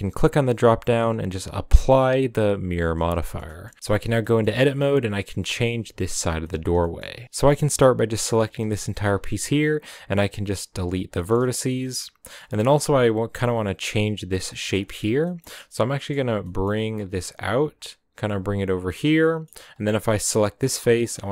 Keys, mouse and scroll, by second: 2.6-3.2 drag, 3.2 shift+middle click, 3.4 scroll up 1, 3.4-4.6 middle drag, 4.6 a, 5.8-8.7 typing, 6.4 middle click, 6.7 scroll down 1, 6.8-7.1 middle drag, 7.1 scroll up 1, 10.8 x, 11.1-12.4 shift+middle drag, 12.4-13.8 scroll up 3, 13.8 right click, 14.0-14.5 scroll down 4, 14.5-14.8 middle drag, 14.8 scroll up 1, 14.9-16.3 shift+middle drag, 16.3 g, 19.2 middle click, 19.4 middle click, 19.5-20.3 scroll up 4, 20.3 right click, 20.5 scroll down 4, 20.7 middle click, 21.1 g.